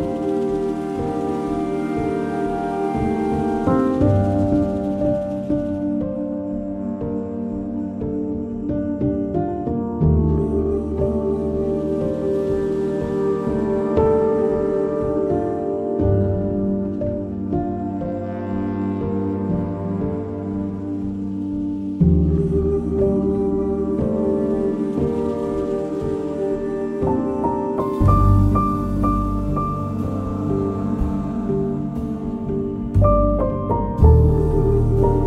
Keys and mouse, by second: 0.0 shift+click, 0.8 j, 1.3 click, 1.7 shift+click, 2.4 j, 3.0 click, 3.5 shift+click, 4.3 j, 5.3 click, 5.8 shift+click, 6.6 j, 7.1 click, 8.4 j, 9.2 alt+z, 9.9 click, 11.2 j, 14.5 j, 16.2 j, 17.7 j, 19.7 j, 20.5 2, 20.8 click, 21.5 ctrl+b, 25.5 ctrl+b, 26.8 click, 28.7 ctrl+b, 31.3 1, 31.7 click, 32.9 j, 33.3 click, 34.6 j, 35.1 2.